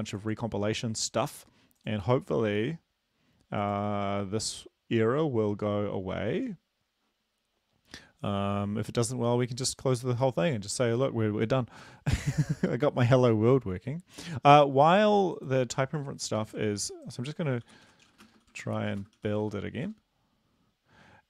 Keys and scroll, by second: 16.4 ctrl+`, 17.6-19.8 typing.